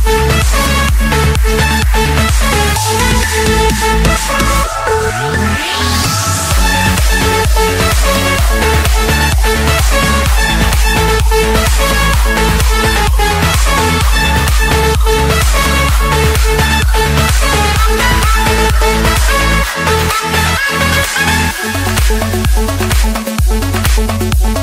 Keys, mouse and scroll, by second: 2.8 click, 4.6 right click, 6.6 click, 11.5 click, 12.7 middle click, 14.0 click, 14.5 right click, 15.8 click, 17.3 click, 18.6 click, 20.0 click, 20.7 click, 21.0 scroll, 22.1 click, 22.4-23.0 scroll, 23.3 Escape, 24.2-24.6 drag.